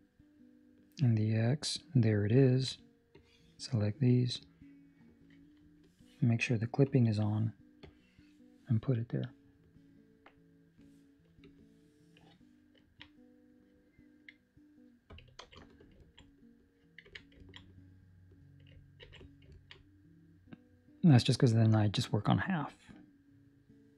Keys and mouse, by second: 2.3 ctrl+middle click, 3.1 click, 4.3 click, 6.8 click, 7.7 click, 11.4 click, 12.7 ctrl+middle click, 13.0 middle click, 15.4 ctrl+space, 16.1 ctrl+middle click, 16.2 middle click, 17.0 Tab, 17.5 ctrl+middle click, 17.5 middle click, 19.0 ctrl+s, 19.5 ctrl+middle click, 19.7 middle click, 22.1 middle click.